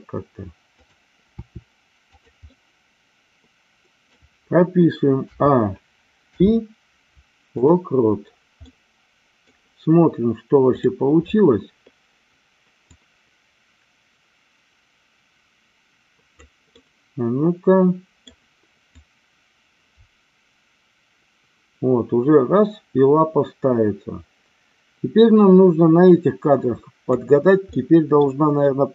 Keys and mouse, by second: 1.3 r, 2.1 click, 2.6-4.2 middle drag, 5.2 a, 6.2 i, 8.6 middle click, 10.7 click, 12.9-16.4 drag, 16.9-18.2 middle drag, 18.9-27.1 drag, 27.7 middle click.